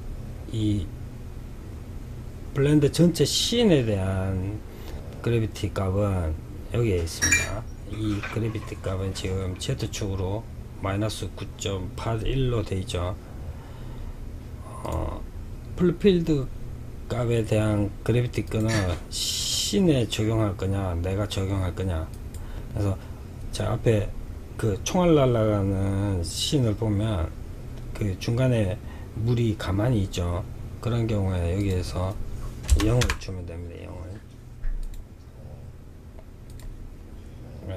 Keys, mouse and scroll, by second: 6.4-9.4 drag, 13.9 click, 16.6-17.5 scroll down 1, 17.5-20.5 drag, 30.8-33.8 drag, 34.1-37.0 drag.